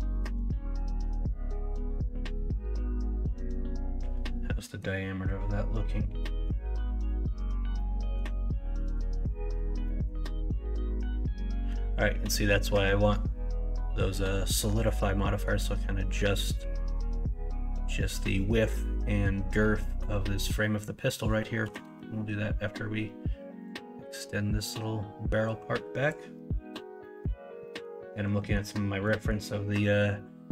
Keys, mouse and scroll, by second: 0.1 2, 1.2-4.8 middle drag, 11.3 middle click, 12.3 middle click, 14.7 middle click, 19.8 middle click, 20.5 middle click, 21.6 KP_1, 21.8 KP_3, 24.6-26.1 drag.